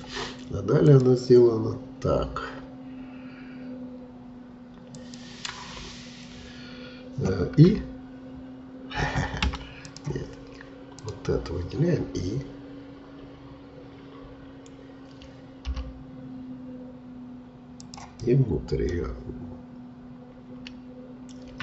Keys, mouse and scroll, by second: 9.8-14.0 drag, 18.2-21.3 middle drag.